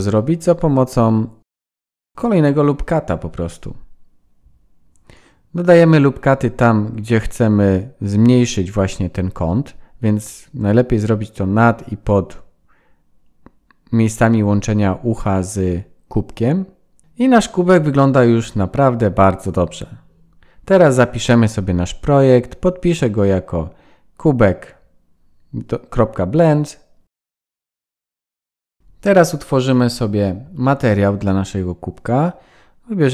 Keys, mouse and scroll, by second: 0.3-1.1 scroll down 4, 1.1-1.9 scroll up 2, 2.6-4.1 scroll down 2, 4.9 ctrl+r, 8.4 ctrl+r, 11.7 ctrl+r, 13.7 ctrl+r, 15.4 Tab, 16.1 shift+middle click, 16.5-16.9 scroll down 3, 16.9 scroll up 1, 16.9 middle click, 17.6-18.1 scroll down 4, 18.1-18.8 scroll up 3, 19.0 ctrl+s, 26.2 KP_1, 27.0 click, 27.4 click, 31.3 click.